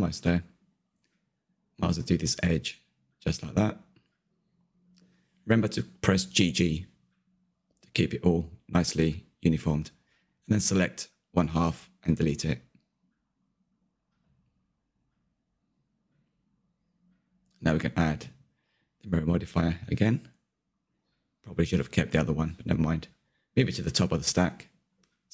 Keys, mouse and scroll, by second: 0.2 Tab, 0.3 middle click, 0.8 Tab, 0.9 shift+middle click, 1.1 scroll up 3, 1.2-2.7 shift+middle drag, 2.7 2, 2.8 click, 3.1 g, 5.2 scroll down 1, 5.3 middle click, 5.5 z, 5.6-6.7 middle drag, 6.7 1, 6.8 click, 7.1 g, 7.7 z, 7.8 scroll down 2, 8.0 Tab, 8.3 middle click, 8.4 scroll down 1, 8.6 shift+middle click, 8.9 ctrl+KP_3, 9.5 Tab, 10.7 z, 15.4 click, 17.5 Delete, 18.2 Tab, 18.9 z, 19.1-22.8 middle drag, 22.8-25.3 drag.